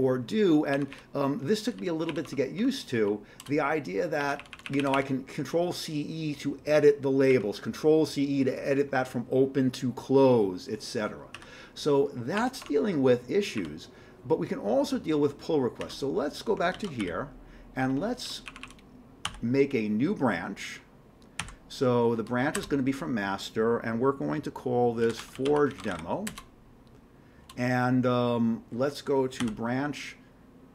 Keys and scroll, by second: 0.8 Up, 2.1 Up, 2.3 Tab, 2.6 Tab, 3.0 Down, 3.4 Return, 4.2 Up, 4.4 Up, 4.5 Up, 4.7 Up, 11.4 q, 12.6 Tab, 13.6 Up, 15.8 q, 16.7 ctrl+x, 17.0 g, 18.5 Up, 18.6 Up, 19.2 b, 21.4-23.0 typing, 24.8-26.4 typing, 29.4 b.